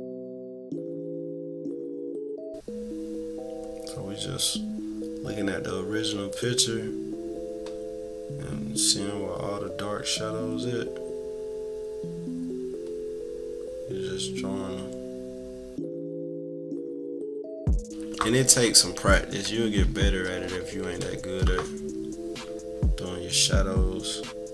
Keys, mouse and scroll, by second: 1.8 -, 2.1 =, 2.3 scroll down 2, 3.7-17.6 drag, 18.4 -, 19.5-20.9 typing, 20.0-20.5 scroll up 4, 21.3 scroll up 2, 23.3-24.5 drag.